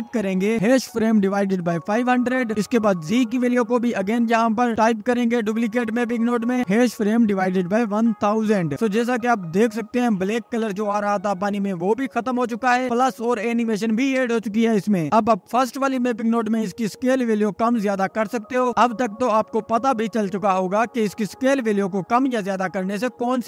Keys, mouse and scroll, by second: 2.7 KP_0, 4.3-7.9 drag, 8.6 KP_0, 9.4 scroll down 12, 9.7-10.8 drag, 11.5 scroll down 2, 12.7 click, 13.5 scroll up 1, 14.6 space, 15.0 middle click, 15.4-15.7 scroll up 10, 16.1-19.0 drag, 19.0 space, 19.5-21.0 scroll down 1, 21.0 click, 22.7-23.2 scroll up 2, 23.2 space.